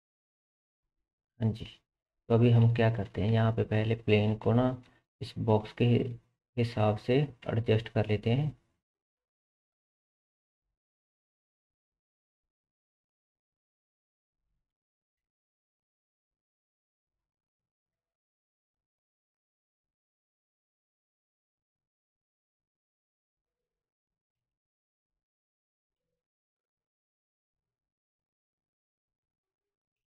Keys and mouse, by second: 0.8-4.5 drag, 3.3 Tab, 4.4 1, 4.5 middle click, 4.6-27.4 drag, 5.5 g, 11.0 g, 13.8 middle click, 13.8 right click, 14.6 g, 17.4 g, 20.7 shift+middle click, 20.7 shift+right click, 21.5 g, 23.9 middle click, 23.9 right click, 24.4 shift+z, 25.5 g, 29.3 shift+click.